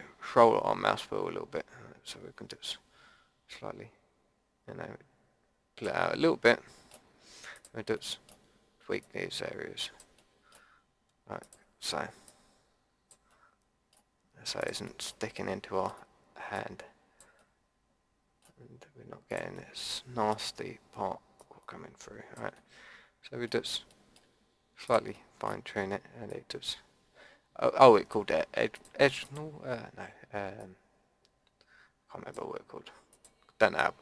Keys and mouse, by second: 6.0 middle click, 6.6 click, 7.5 click, 8.3-10.1 drag, 10.1 middle click, 10.3 middle click, 10.4 click, 12.3-13.3 drag, 13.5-15.5 drag, 15.5-17.3 middle drag, 17.3 click, 17.5 middle click, 18.3-19.5 drag, 19.5-21.4 middle drag, 21.4-22.5 drag, 22.5 middle click, 24.8-26.3 middle drag, 26.4-28.2 drag, 28.7-34.0 drag.